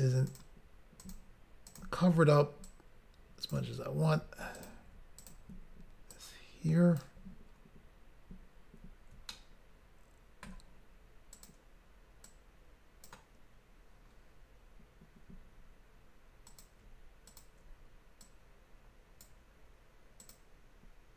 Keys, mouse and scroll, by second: 0.3 shift+click, 0.4 shift+click, 1.0 shift+click, 1.1 shift+click, 1.7 shift+click, 1.8 shift+click, 2.6 click, 4.5 click, 4.7 click, 5.2 shift+click, 5.3 shift+click, 6.1 click, 9.3 shift+middle click, 11.4 click, 12.3 click, 16.5 click, 16.6 click, 17.3 shift+click, 17.4 shift+click, 18.2 click, 20.2 click, 20.4 click.